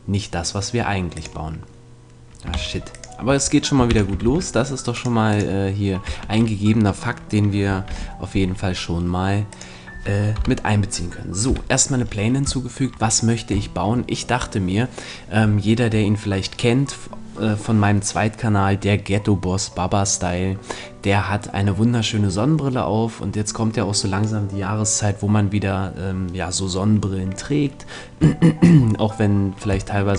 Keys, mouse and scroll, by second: 2.5 shift+x, 3.9 shift+c, 4.2 shift+a, 6.1 Tab, 7.9 alt+m, 10.3 KP_1, 11.5 KP_7, 12.1-13.9 middle drag.